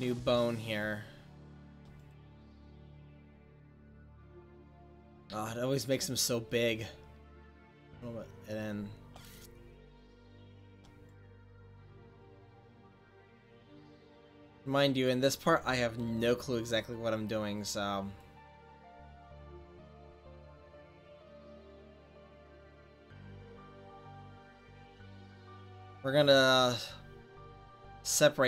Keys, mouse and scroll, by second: 2.0-3.6 right drag, 3.6 middle click, 6.5-7.7 right drag, 6.6-8.1 drag, 8.1 middle click, 9.0 middle click, 11.1-15.5 right drag, 15.5 click, 18.2-20.1 drag, 20.1 middle click, 23.5 click, 23.6 middle click, 23.7 click, 24.1 middle click, 24.5-28.3 middle drag, 27.3-28.4 drag, 27.3-28.3 right drag.